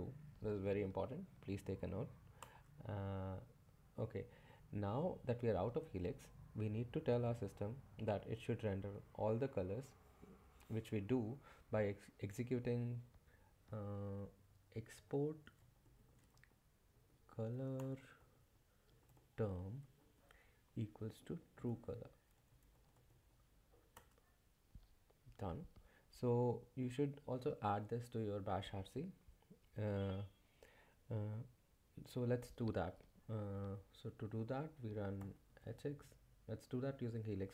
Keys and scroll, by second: 0.0-0.3 typing, 1.5-2.2 typing, 2.4 Return, 14.2-23.6 typing, 23.9 Return, 34.9-35.8 typing.